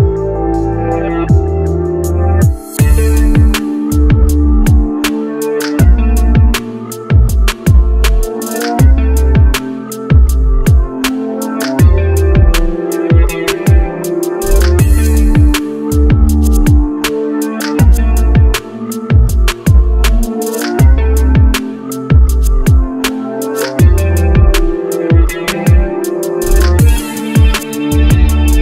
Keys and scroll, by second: 1.9 ctrl+z, 12.6 shift+space.